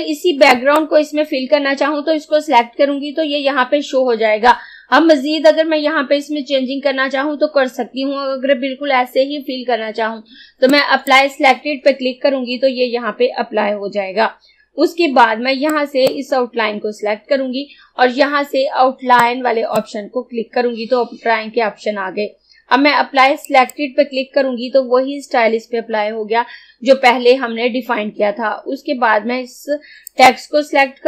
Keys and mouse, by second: 0.5 click, 10.7-14.3 drag, 15.7-19.3 drag, 19.3-22.2 drag, 23.5 click, 30.1 click.